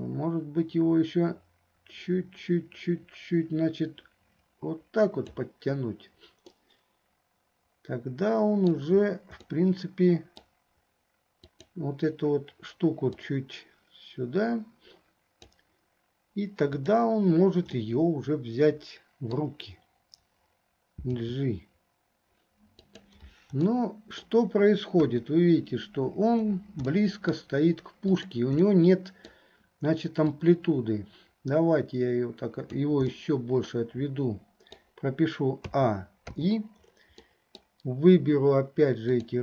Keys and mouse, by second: 5.5 right click, 6.6-9.0 middle drag, 9.7 click, 11.6 click, 13.5-15.8 drag, 16.8 click, 18.0-19.6 middle drag, 23.9 middle click, 27.1 middle click, 28.8 click, 28.8 right click, 30.6-33.1 right drag, 33.2-35.0 middle drag, 35.9 a, 36.5 i, 37.4 middle click, 39.2 click.